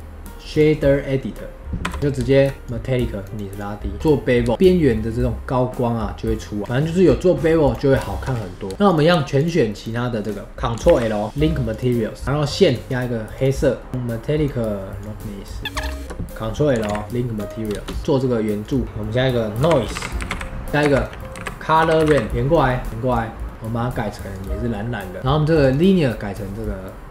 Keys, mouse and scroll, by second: 1.8 n, 2.0 scroll up 1, 2.2 shift+middle click, 2.6-3.9 drag, 3.9-4.5 scroll up 4, 4.5 shift+middle click, 4.5-5.6 scroll down 3, 5.6-6.2 scroll down 1, 6.6-7.3 scroll down 5, 7.6-8.0 drag, 8.0 shift+middle drag, 8.3 scroll up 4, 8.7 shift+middle click, 8.8-10.8 drag, 10.8 ctrl+l, 12.2-14.1 click, 14.1-15.7 drag, 16.8 ctrl+l, 17.7 space, 18.0 click, 18.6 click, 18.8 shift+a, 20.7 click, 20.8 shift+a, 22.3 click, 22.9 click, 23.4 middle click, 23.5 click, 25.2-27.1 middle drag.